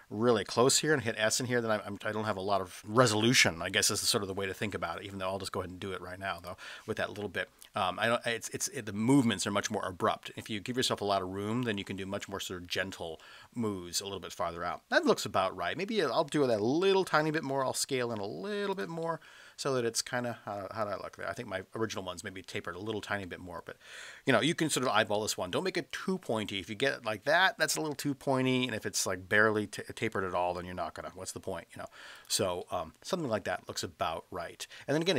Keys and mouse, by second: 0.7 s, 6.4 click, 14.9-16.1 middle drag, 16.9 s, 18.7 drag, 19.0-19.9 middle drag, 19.9 click, 20.0-21.7 middle drag, 22.1-22.7 middle drag, 25.1 s, 32.1 click, 32.6-34.0 middle drag.